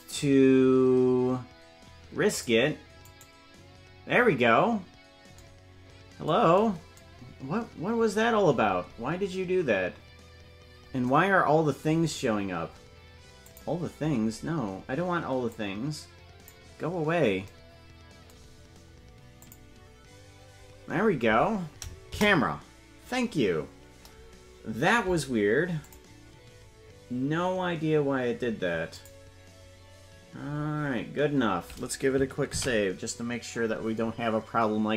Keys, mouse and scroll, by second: 3.2 right click, 8.2-9.2 scroll down 12, 11.0 scroll down 3, 13.4 click, 13.9-15.5 scroll down 7, 15.5 scroll down 2, 15.5 click, 19.6 click, 22.0 KP_0, 25.8 click, 28.9 click, 34.6 ctrl+s.